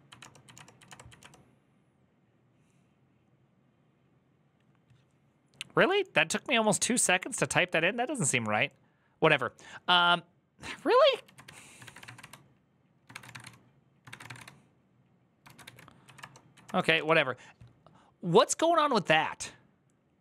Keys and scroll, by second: 0.0 Return, 0.2 Up, 0.3 Return, 0.6 Up, 0.6 2, 0.6 Return, 0.9 Up, 1.0 Return, 11.0-17.2 typing.